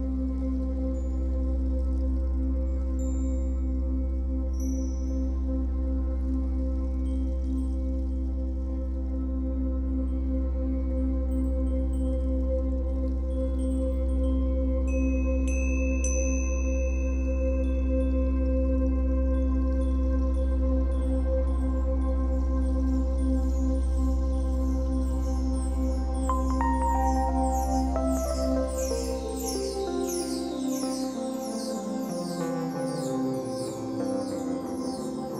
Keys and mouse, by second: 2.2-11.5 drag, 11.5-11.9 typing, 13.1-17.7 drag, 14.6-15.3 typing, 16.9 typing, 18.0 click, 23.5 typing, 25.3 click, 26.6 click, 27.5-33.9 drag, 35.2-35.3 alt+shift+drag.